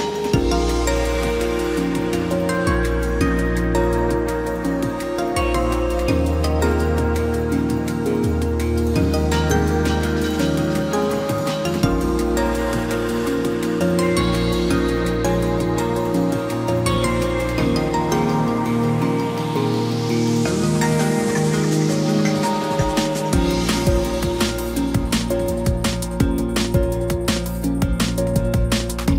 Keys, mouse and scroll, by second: 15.8 ctrl+j, 26.9 ctrl+j.